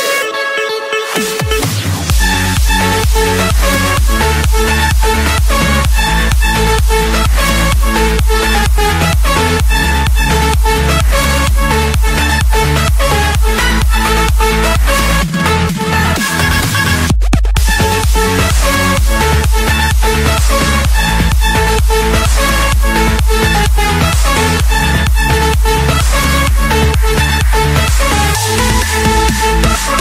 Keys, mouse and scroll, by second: 0.4 right click, 2.6 click, 3.5 click, 5.6 click, 6.2 right click, 7.3 click, 9.1 middle click, 9.2-10.6 scroll up 4, 10.6 scroll down 1, 11.1 Escape, 12.0-13.6 typing, 15.1-16.1 drag, 16.3-17.4 drag, 17.4 Return, 18.1 Return, 18.9 Escape, 20.3-21.3 right drag, 21.5-22.5 drag, 23.1-24.2 drag, 24.3 click, 25.1 click, 26.2 click, 28.0 click, 28.3-29.8 scroll.